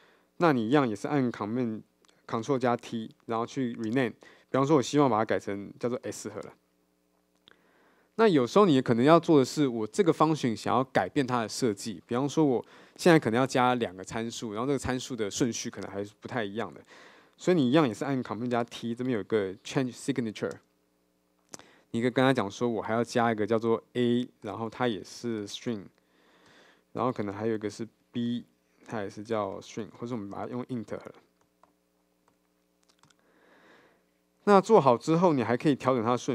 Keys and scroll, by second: 2.9 ctrl+alt+t, 4.1 shift+F6, 18.7 ctrl+alt+t, 20.7 super+F6, 26.5 Return, 33.1 Return.